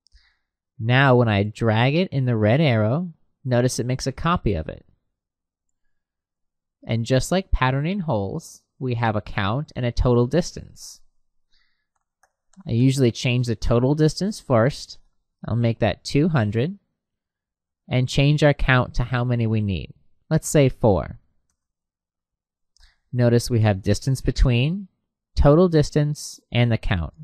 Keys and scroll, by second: 10.7 Tab, 15.0 2, 16.3 Tab, 20.9 4, 21.4 Return.